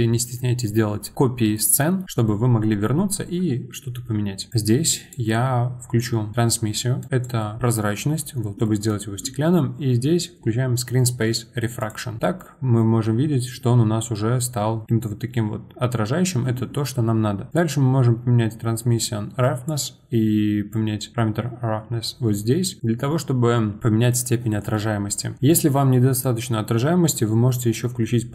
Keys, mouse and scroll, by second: 2.0-4.5 middle drag, 4.5-8.6 drag, 8.6-11.8 middle drag, 11.8 click, 12.7-14.3 scroll up 6, 14.3-14.9 scroll down 6, 15.5-17.5 scroll up 2, 17.5-23.2 drag, 24.7-26.2 middle drag, 26.2-28.3 drag.